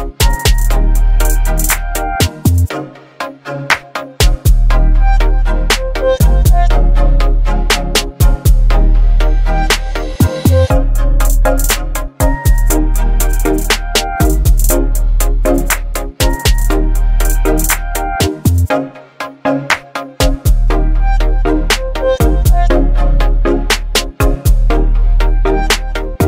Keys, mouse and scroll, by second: 0.2-1.1 click, 0.6 space, 1.7 x, 3.3 click, 7.2 click, 7.3 click, 8.6 x, 11.6-12.5 click, 12.6 space, 12.7-13.6 click, 13.1 space, 15.6-17.2 alt+right drag, 17.5-19.7 alt+scroll up 2, 20.3-21.9 alt+right drag, 22.5 click, 23.6 x, 25.1-26.2 drag.